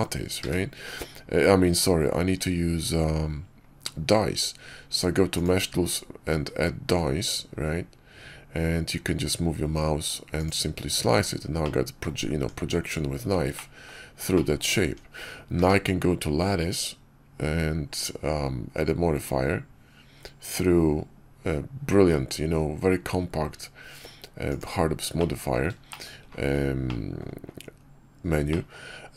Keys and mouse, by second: 0.3 q, 11.0 Tab, 11.5 click, 12.2 Tab, 13.4 click, 14.2 click, 14.7 Tab, 15.5 q, 25.1-25.4 drag, 25.8 shift+click, 26.8-27.1 drag, 28.4 middle click.